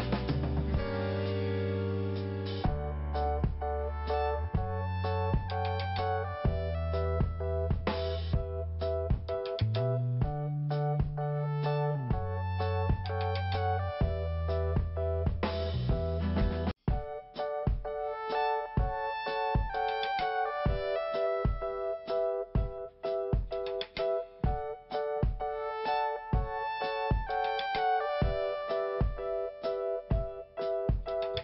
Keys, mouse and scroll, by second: 0.9 click, 2.8 click, 6.8 click, 6.9 click, 7.5 click, 10.7 click, 10.8 click, 11.2 click, 12.5 click, 12.6 click, 13.3 click, 17.9 click, 20.6 click, 23.5 click, 24.4 click, 27.9 scroll down 1, 28.5 scroll up 1, 29.2 scroll up 1, 30.1 click.